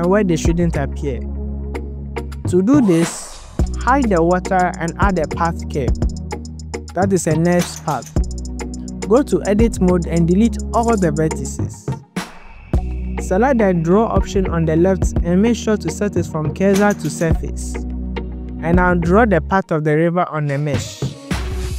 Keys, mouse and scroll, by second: 3.5 click, 3.9 click, 4.3 click, 4.8 click, 6.5 click, 6.8 click, 8.9 Tab, 9.3 KP_7, 9.6 scroll down 2, 9.8 shift+click, 10.3 x, 11.2 click, 11.7 click, 11.9 click, 13.6-14.1 scroll up 2, 14.1 shift+click, 15.1-16.1 drag, 17.7 ctrl+z, 17.8 scroll down 1, 17.9 click, 18.7 scroll up 2, 18.8 click, 19.0-21.4 typing, 19.9 click, 20.1 shift+click, 20.1 scroll up 2, 20.2 click, 20.5 click, 20.7 click, 21.2 scroll down 2, 21.6 shift+click, 21.7 scroll up 2.